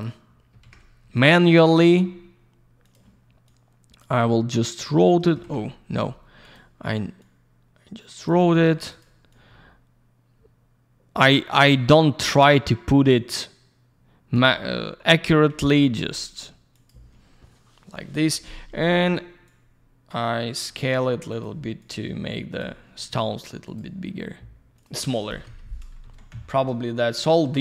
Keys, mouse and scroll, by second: 0.0 click, 0.6 ctrl+a, 1.1 click, 1.2 click, 1.4 click, 1.5 double click, 2.8 click, 2.9 click, 3.4 click, 4.2 click, 5.4 ctrl+я, 6.4 click, 6.5 click, 7.1 click, 8.5 click, 8.6 click, 8.8 click, 8.9 double click, 9.3 click, 11.5 click, 11.6 click, 11.9 click, 15.5 ctrl+a, 16.0-16.4 scroll down 1, 16.7 click, 16.8 click, 17.6 scroll down 1, 18.9 click, 19.0 click, 19.4 click, 21.3 click, 21.4 click, 21.8 click, 23.6 click, 23.7 click, 24.7 click, 24.8 click, 25.1 click, 25.2 click, 25.4 F4, 26.0 alt+shift+й.